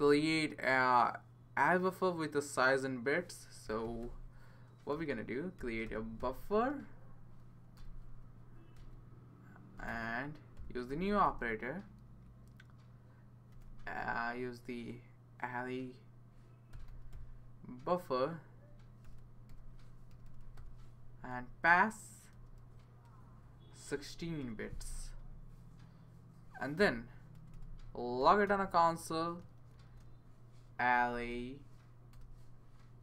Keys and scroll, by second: 3.4-11.6 typing, 13.2-14.0 typing, 16.4-17.6 typing, 18.8-21.0 typing, 22.1-25.7 typing, 23.4 Left, 24.4 Left, 26.8 typing, 27.3 Return, 28.2 typing, 28.4 shift+Tab, 29.9-33.0 typing.